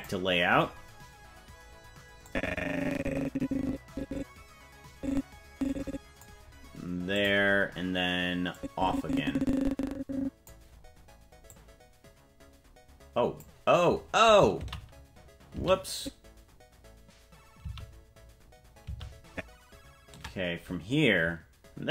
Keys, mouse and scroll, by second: 0.0 click, 2.2-6.2 drag, 7.1 click, 8.5-10.5 drag, 11.4-13.4 drag, 15.0 ctrl+z, 16.0 ctrl+z, 18.1 ctrl+z, 19.3 ctrl+z.